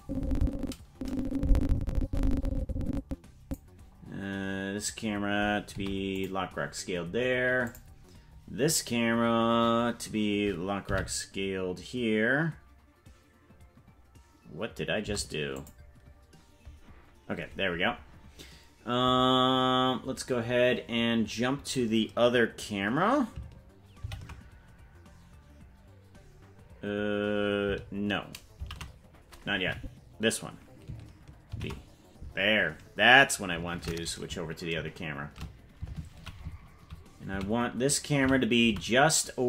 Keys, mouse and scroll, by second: 0.0-3.5 drag, 5.7 i, 7.6 click, 10.9 i, 15.0 i, 24.0 ctrl+b, 28.9 ctrl+z, 29.7 Right, 31.5 ctrl+b, 33.7 shift+`.